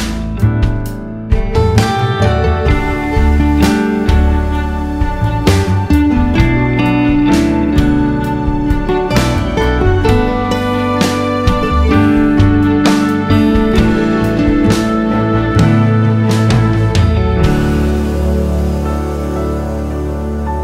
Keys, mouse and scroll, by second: 3.5-4.7 drag, 5.7 click, 6.3 click, 6.9 click, 10.1 scroll down 2, 10.4 alt+a, 10.5 `, 11.9 KP_0, 12.3 scroll up 1, 14.6 click, 15.3 click, 17.9-20.6 drag.